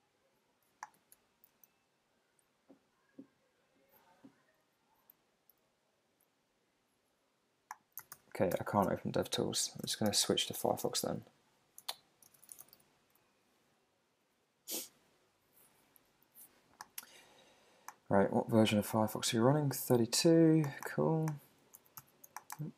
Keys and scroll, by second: 1.0 Return, 5.6 alt+super+i, 8.1 alt+super+i, 9.8 super+q, 10.1 super+space, 11.8 super+z, 12.3 super+space, 13.1 Return, 21.8 super+a, 22.0 super+c.